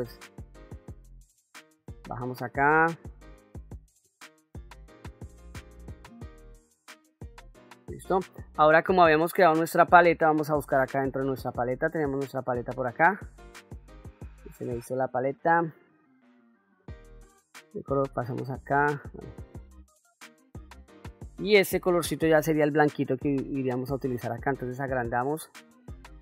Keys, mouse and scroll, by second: 0.9 f, 2.2-3.2 drag, 3.4 middle click, 4.3-6.8 drag, 7.4 ctrl+middle click, 8.3 middle click, 11.5 middle click, 12.7 middle click, 13.9 middle click, 15.4-16.5 middle drag, 18.0 click, 19.2 middle click, 20.1 middle click, 21.3 click, 22.7 middle click, 24.7 f.